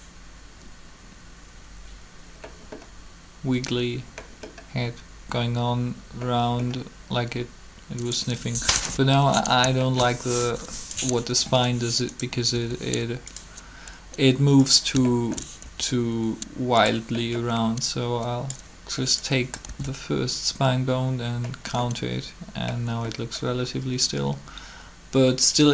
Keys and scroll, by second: 8.7 7, 12.5 r, 15.6 alt+shift+r, 19.7 alt+a.